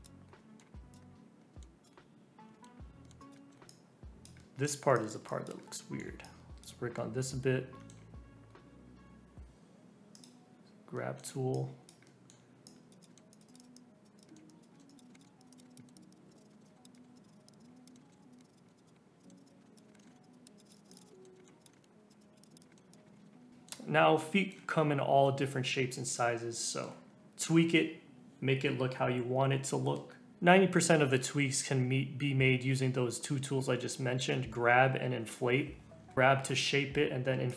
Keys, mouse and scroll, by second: 0.0 click, 0.3-0.9 scroll down 2, 0.4 middle click, 0.9 click, 1.4 scroll up 3, 1.5 middle click, 1.8 click, 2.5 shift+middle click, 2.7-3.0 scroll up 4, 3.0 middle click, 3.2 click, 3.3 middle click, 3.7 click, 4.4 middle click, 4.9 click, 5.6 middle click, 6.2 click, 6.9-8.6 middle drag, 8.6-9.3 scroll up 1, 9.3-10.1 scroll up 1, 10.1 click, 10.5-10.9 scroll up 1, 10.9 middle click, 11.5 click, 12.0 middle click, 12.6 click, 13.1 middle click, 13.3 click, 14.2 middle click, 14.4 click, 14.7 middle click, 14.9 click, 15.1 middle click, 15.2 click, 15.2 middle click, 15.4 click, 15.6 middle click, 15.7 click, 15.8 middle click, 15.9 click, 16.1-19.5 typing, 16.3 click, 16.5 middle click, 16.6 click, 16.7 middle click, 16.9 click, 16.9 middle click, 17.1 click, 17.6 scroll up 4, 17.7 click, 17.9 middle click, 17.9 scroll down 2, 18.0 middle click, 18.2 click, 18.3 middle click, 18.4 click, 18.6-19.0 scroll down 5, 18.6 middle click, 18.8 click, 19.0 scroll up 1, 19.2 click, 19.2 middle click, 19.3 click, 19.6 middle click, 19.7 click, 19.8 scroll down 1, 19.9 middle click, 19.9-20.5 scroll up 5, 20.0 shift+middle click, 20.2 click, 20.5 middle click, 20.5 click, 21.1 middle click, 21.2 scroll down 3, 21.3 middle click, 21.3-22.1 scroll up 4, 21.6 click, 22.1 click, 22.6-23.1 scroll down 9, 22.7 middle click, 22.9 click, 23.1 scroll up 1, 23.2 shift+middle click, 23.3 scroll down 1, 23.4-24.0 scroll up 5, 23.5 middle click, 24.2 middle click, 24.7 scroll up 3, 25.5-25.9 scroll down 2, 25.9-27.1 middle drag, 27.1 scroll up 2, 30.3 scroll down 2, 30.4-31.6 scroll up 3, 30.8 middle click, 36.0 scroll up 2, 36.1 scroll down 4, 36.4 scroll up 1, 37.4 click.